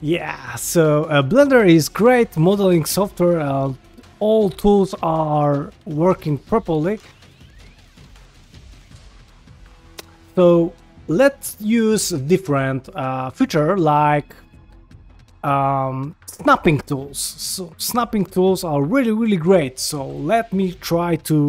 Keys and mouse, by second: 0.5 shift+middle click, 0.9 ctrl+middle click, 1.1 middle click, 2.6 middle click, 3.4 ctrl+middle click, 3.6 ctrl+middle click, 4.2 shift+middle click, 4.6-6.1 middle drag, 6.3 shift+middle click, 6.6 middle click, 6.9 ctrl+Tab, 7.4 shift+middle click, 8.0 g, 10.4 g, 11.4 shift+middle click, 11.8 middle click, 12.2 shift+middle click, 12.4 ctrl+middle click, 12.7 middle click, 13.1 shift+middle drag, 13.7 ctrl+middle click, 17.3 shift+middle drag, 17.8 shift+right click, 18.3 shift+a, 20.0 g.